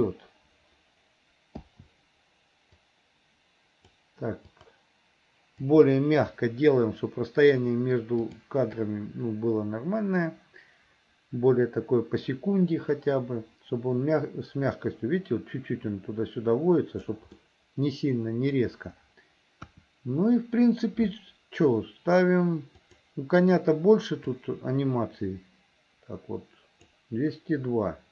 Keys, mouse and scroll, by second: 2.9-4.1 drag, 4.5 click, 5.7 Delete, 8.3 click, 8.9-17.3 drag, 17.4 middle click, 18.5 middle click, 19.7 KP_1, 22.9 click, 24.4-27.0 drag.